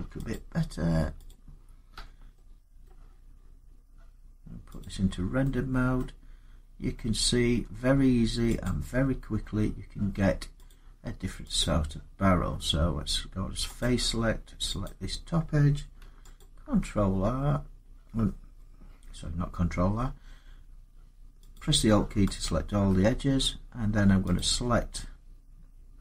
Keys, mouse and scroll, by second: 0.1 click, 1.1 click, 1.7 Tab, 2.6 middle click, 4.6 click, 5.8 middle click, 6.4 middle click, 6.5 middle click, 7.3 Tab, 8.4 click, 10.5 click, 11.4 click, 13.5 scroll up 2, 13.9 click, 14.6 click, 16.2 alt+click, 21.3 click, 22.2 alt+click, 24.1 click.